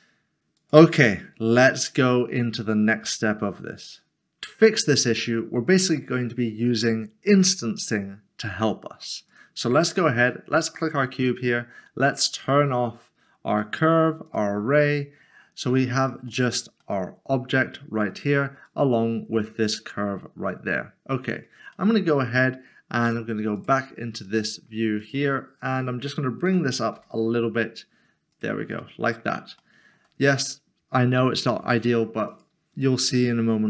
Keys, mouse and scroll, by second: 0.6 click, 4.4 click, 4.6 middle click, 5.5 shift+middle click, 9.3 click, 13.5 click, 16.5 middle click, 18.7 click, 21.2 click, 21.7 middle click, 23.6 click, 24.4 shift+middle click, 26.9 typing, 28.3 click, 28.8 middle click, 29.6 shift+middle click, 32.3 click.